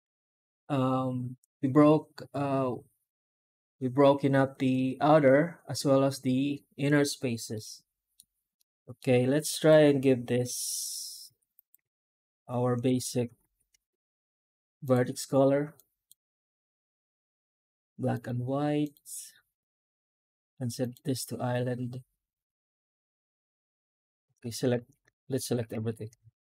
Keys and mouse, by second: 7.4 middle click, 8.4-8.8 middle drag, 9.4 right click, 10.2 h, 10.6 middle drag, 11.4 right click.